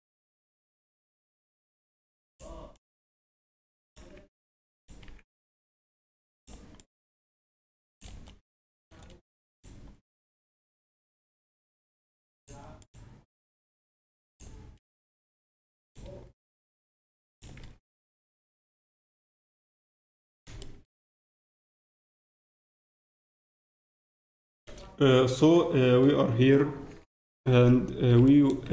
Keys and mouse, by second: 4.1 z, 4.3 z, 5.0 z, 5.5-9.0 drag, 9.0-10.9 middle drag, 9.5-11.5 right drag, 10.0-12.1 drag, 12.8-14.8 right drag, 13.3-15.0 drag, 15.0 z, 15.5 z, 15.8-17.7 right drag, 16.3-18.2 drag, 17.6 z, 18.2 Tab, 18.2 z, 21.3 Tab, 22.7 z, 24.6 a, 27.0 a, 27.4 a, 28.1 b.